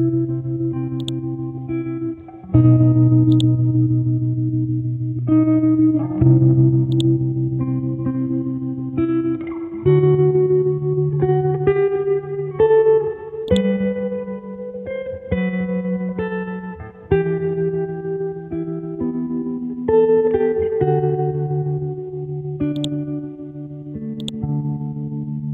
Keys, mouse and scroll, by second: 1.0-12.3 drag, 14.3-15.5 scroll up 1, 15.5 F12, 18.1 Tab, 18.4 KP_2, 20.0 scroll down 1, 20.7-22.7 scroll up 1, 22.7 right click, 24.2 click, 24.8 scroll up 1.